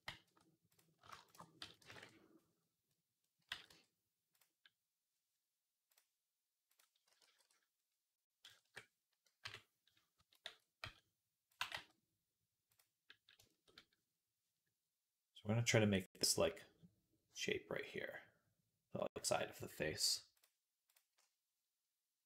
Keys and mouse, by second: 1.5 s, 2.7 click, 3.1-4.5 drag, 3.3 g, 5.8 click, 6.9 s, 9.3 KP_3, 10.0 a, 10.3 s, 11.4 g, 13.3 shift+click, 13.5-22.2 middle drag, 20.2 click, 22.2 click.